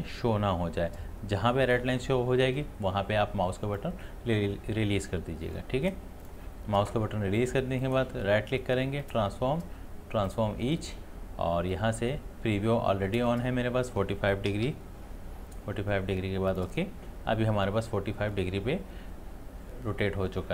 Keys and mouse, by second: 6.2 click, 7.8 right click, 9.0 click, 16.5 click.